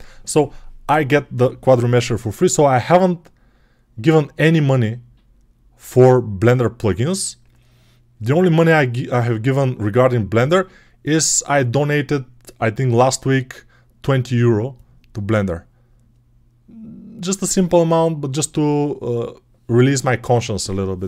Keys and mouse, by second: 7.6-21.0 drag.